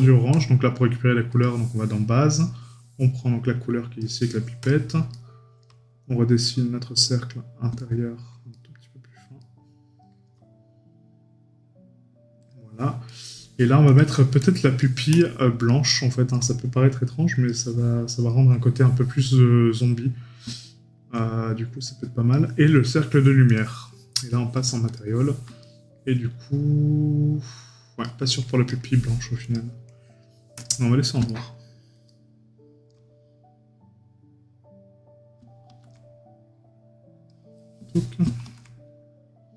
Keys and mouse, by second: 5.1 right click, 7.8 right click, 13.1 right click, 15.7 right click, 20.6 right click, 25.6 right click, 28.0 right click, 31.3 right click.